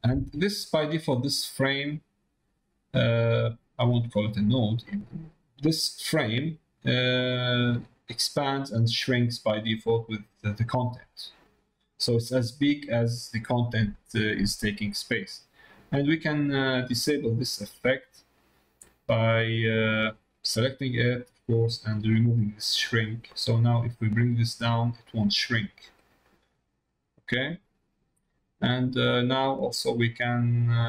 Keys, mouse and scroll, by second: 0.1 middle click, 0.7 middle click, 1.2 click, 3.8 middle click, 4.7 middle click, 7.2-13.8 drag, 14.4 middle click, 15.0 middle click, 22.6 click, 24.2 click, 26.0 click, 27.2 click, 29.0 click.